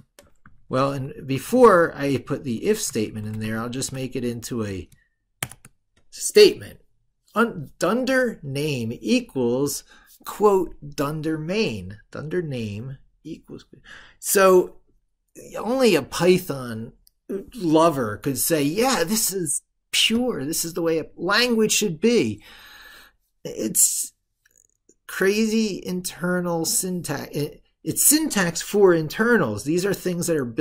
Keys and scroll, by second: 0.6 ctrl+Left, 1.9 ctrl+Right, 2.7 ctrl+Left.